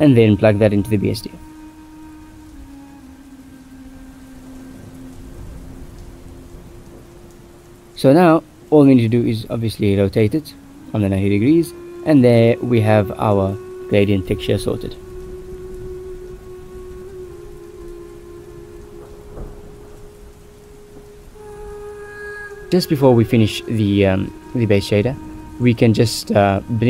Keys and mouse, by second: 0.3 drag, 1.0 g, 1.9 click, 2.3 g, 3.6-4.5 drag, 5.1 ctrl+shift+drag, 5.6 ctrl+s, 8.2 click, 9.0 click, 9.5 click, 10.6 middle click, 11.3 middle click, 12.6-13.7 drag, 15.8 ctrl+s, 16.6 middle click, 18.6-19.3 drag, 22.4 ctrl+s, 23.5 click, 24.2 ctrl+s, 24.4 click, 26.8 click.